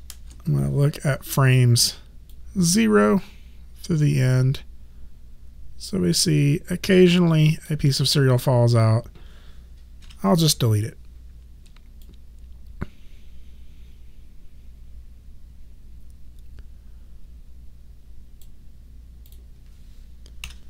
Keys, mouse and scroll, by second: 0.1 Return, 2.3 click, 8.7 click, 10.0 Delete, 12.0 click, 19.3 click, 20.4 Delete.